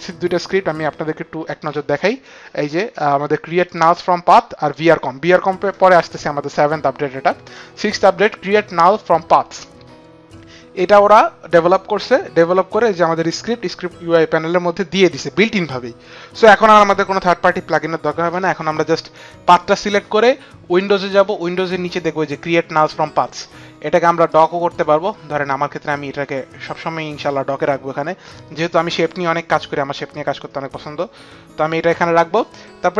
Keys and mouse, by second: 1.4 click, 3.4 click, 4.4 click, 7.3 click, 15.4 click, 22.6 click, 24.1 click, 25.8 click, 28.7 click, 30.8 click.